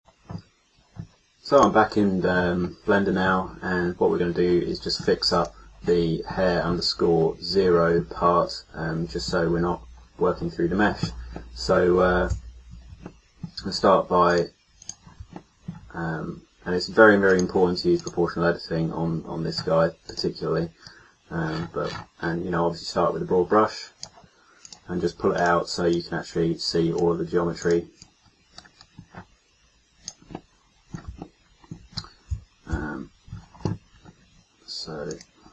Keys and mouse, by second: 0.0 a, 12.3 KP_1, 13.2-14.8 middle drag, 19.4-21.7 middle drag, 24.0 middle click, 30.4-32.7 middle drag, 32.7 KP_3, 35.0 click.